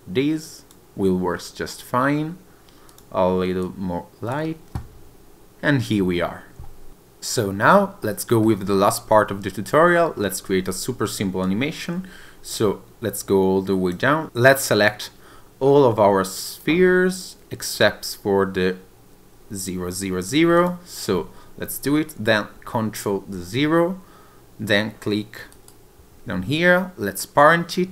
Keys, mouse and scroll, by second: 1.4 scroll up 1, 3.9 click, 6.0-6.9 scroll down 1, 6.9-7.3 scroll up 1, 8.1 middle click, 10.2-11.5 scroll down 3, 11.5 click, 14.2 click, 15.7-16.6 scroll up 2, 16.6 click, 20.6 shift+click, 23.0 ctrl+click, 25.6 right click.